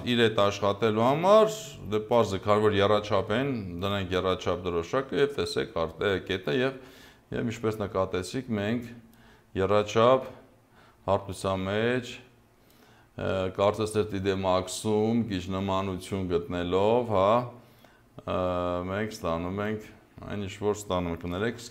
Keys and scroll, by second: 21.6 ctrl+z.